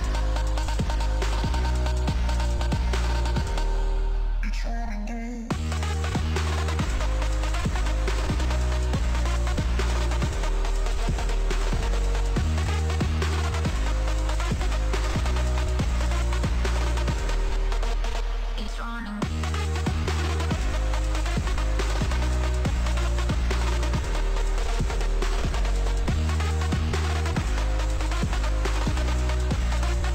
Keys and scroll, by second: 4.7 space, 19.2 ctrl+s, 22.6 ctrl+s, 29.4 ctrl+d.